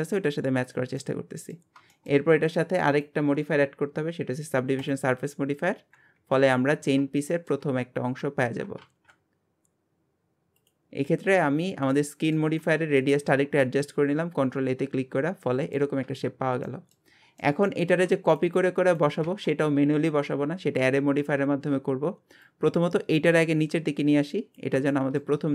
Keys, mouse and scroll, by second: 0.1 scroll down 1, 0.6 Tab, 1.0-2.9 middle drag, 4.9-6.0 drag, 6.2 KP_1, 7.3 shift+middle click, 7.7-8.2 scroll up 1, 8.2 Tab, 8.8 ctrl+a, 11.0 scroll down 1, 11.3-12.7 middle drag, 12.7-13.0 scroll down 2, 13.0-16.0 shift+middle drag, 16.0 Tab, 16.4 scroll down 1, 16.7 middle click, 17.2 scroll down 1, 17.4-20.4 middle drag, 21.4-22.4 scroll up 1, 22.4 click, 24.9-25.5 shift+middle drag.